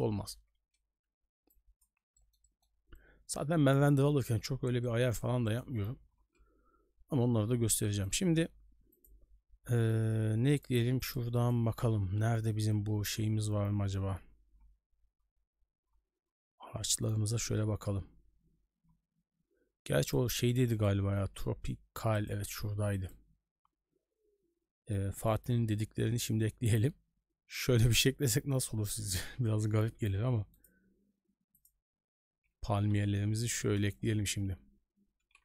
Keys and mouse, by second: 1.5 middle click, 2.2 shift+middle drag, 4.1 middle click, 4.8 shift+middle drag, 5.4 click, 6.3 n, 8.1-32.0 drag, 33.8 KP_0.